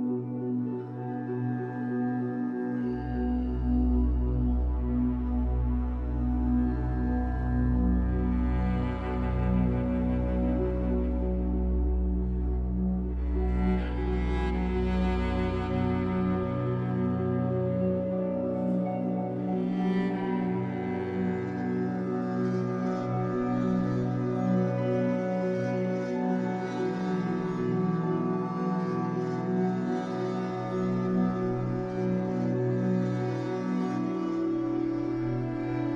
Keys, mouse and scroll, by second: 1.8 click, 2.0 scroll up 2, 2.2-7.2 middle drag, 2.5 scroll down 2, 7.2 click, 8.1 click, 8.3 scroll up 1, 8.5-11.3 shift+middle drag, 10.9 f, 11.6 click, 12.4 middle click, 12.7 click, 13.4 shift+middle click, 13.7 click, 14.4 middle click, 14.8 click, 15.5 middle click, 16.0 click, 16.7 middle click, 17.1-18.5 drag, 18.5 middle click, 18.9 click, 19.6 middle click, 20.0-21.4 drag, 21.4 middle click, 21.8 scroll up 2, 22.0-23.8 drag, 23.8 middle click, 24.3 click, 24.9 middle click, 25.2 click, 25.9 middle click, 26.4 click, 26.9 middle click, 27.5-28.7 drag, 28.7-29.8 middle drag, 29.8-31.5 drag, 31.5-33.3 middle drag, 32.9-33.3 scroll up 2, 33.3-35.1 drag, 34.9 scroll down 1, 35.1-35.9 middle drag.